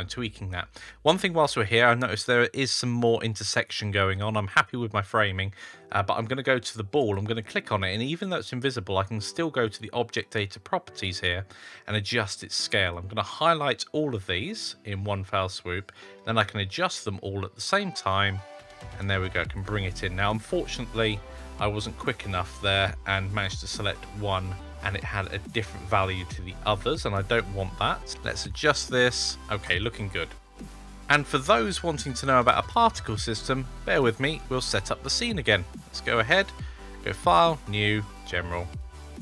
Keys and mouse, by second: 9.5 click, 12.9 click, 14.2-19.4 drag, 20.6-24.6 drag, 25.4-29.1 drag, 29.7-30.2 middle drag, 30.5 middle drag, 34.8-35.7 drag, 36.3-39.2 drag.